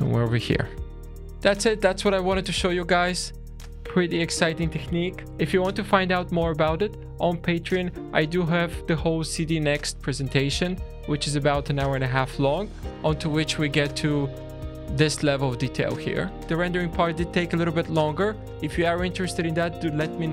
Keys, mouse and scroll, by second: 0.0 scroll down 2, 0.3 shift+middle click, 1.0 shift+middle click, 1.0 scroll up 2.